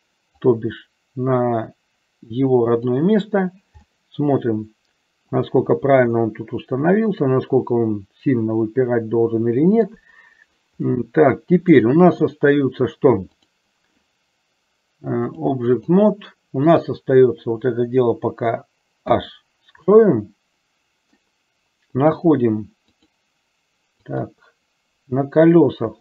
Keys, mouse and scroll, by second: 0.7-3.1 drag, 4.0-5.8 middle drag, 6.0-10.0 middle drag, 11.1 middle click, 13.5 click, 15.4 click, 16.8 click, 19.1 h, 20.2-21.5 middle drag, 22.1 click, 23.0 click, 24.1 click.